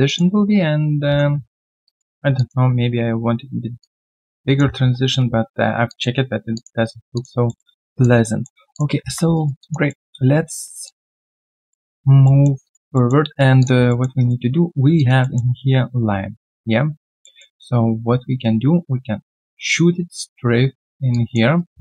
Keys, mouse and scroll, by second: 0.0 alt+click, 1.0 alt+click, 1.3-1.7 scroll down 1, 1.8 alt+click, 2.1 alt+right click, 2.3 alt+click, 3.5 alt+click, 4.7 3, 5.8 alt+click, 6.8 alt+right click, 7.1 alt+click, 7.4 alt+middle click, 7.9 alt+click, 8.2 alt+middle click, 8.9 alt+middle click, 9.3 alt+right click, 9.6 alt+click, 10.8 alt+click, 11.5 alt+middle click, 11.9 alt+click, 12.2 alt+middle click, 12.6 alt+click, 12.9 alt+middle click, 13.9 alt+middle click, 14.1 alt+right click, 14.9 alt+right click, 15.2 alt+middle click, 17.0 alt+middle click, 19.9 alt+middle click, 20.3 right click, 21.5 alt+right click.